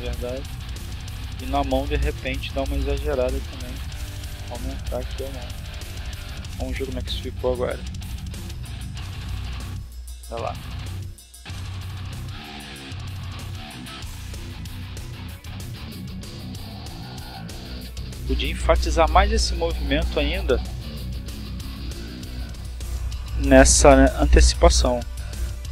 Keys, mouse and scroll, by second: 1.4 click, 2.6 click, 3.3-3.8 drag, 4.6 click, 5.4 click, 6.1-6.8 drag, 7.3 click, 8.5 click, 9.1-11.4 drag, 14.0 click, 15.8 right click, 18.3 r, 19.1 click, 19.8 click, 21.1 click, 22.3 click, 22.8-25.7 drag.